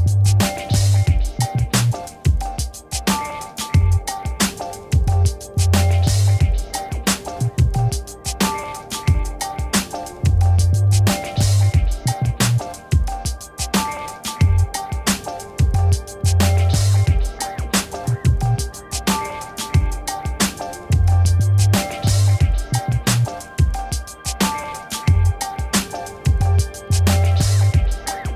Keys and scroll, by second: 1.1 Return, 1.6 ctrl+-, 5.0 space, 12.4 ctrl+-.